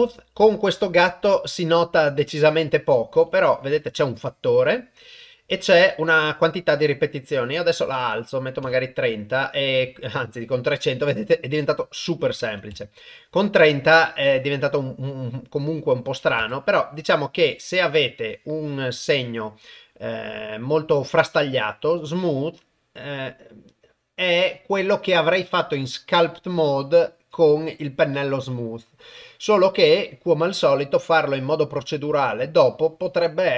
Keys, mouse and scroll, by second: 1.2 ctrl+click, 1.4 ctrl+middle click, 4.2 click, 7.6-8.7 drag, 11.8-12.8 drag, 16.0 click, 18.4 click, 21.3-33.5 drag.